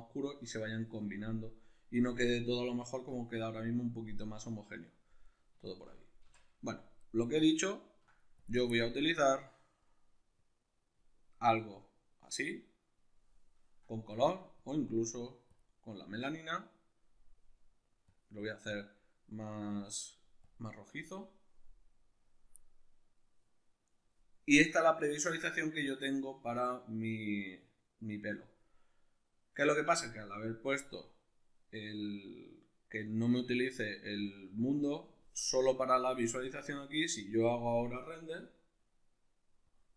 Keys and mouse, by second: 5.2 right drag, 5.6 shift+right click, 6.2 x, 7.1-8.4 middle drag, 8.4 click, 14.7-39.9 drag, 35.3 Escape.